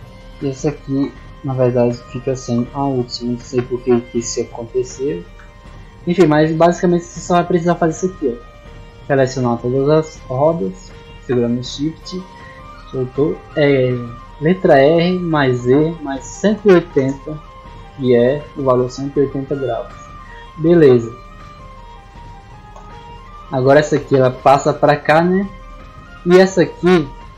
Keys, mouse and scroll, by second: 0.1 shift+right click, 1.7 click, 2.9-4.5 typing, 6.5-6.8 middle drag, 7.0-7.3 shift+middle drag, 7.5-7.8 middle drag, 8.3 right click, 8.8 middle drag, 9.7 shift+right click, 10.4 shift+right click, 11.5 shift+right click, 14.5 r, 17.8 click, 21.2 right click.